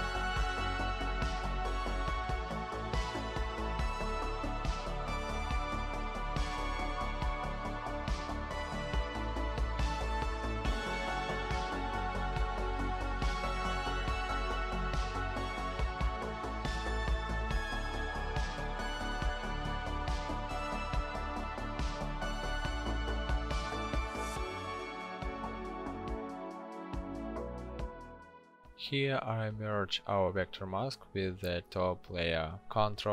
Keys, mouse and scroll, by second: 31.6 ctrl+e.